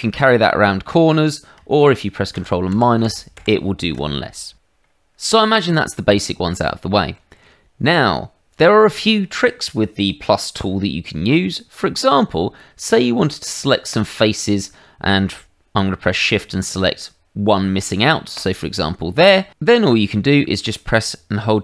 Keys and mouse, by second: 2.3 ctrl+KP_Subtract, 2.7 ctrl+KP_Subtract, 3.0 ctrl+KP_Subtract, 3.3 ctrl+KP_Subtract, 5.2 middle click, 6.2 middle click, 6.8 shift+middle click, 13.9 click, 18.3 shift+click, 20.1 middle click.